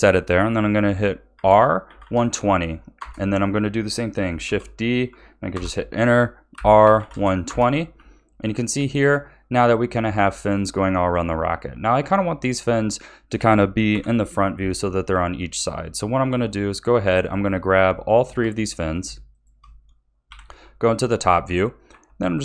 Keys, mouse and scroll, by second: 1.3 r, 4.4 shift+d, 6.5 r, 7.9 a, 8.9-11.9 middle drag, 13.9 KP_1, 16.1-17.2 middle drag, 17.2 click, 18.1 shift+click, 18.6-19.3 middle drag, 19.3 shift+click, 20.2 KP_7, 21.9 r.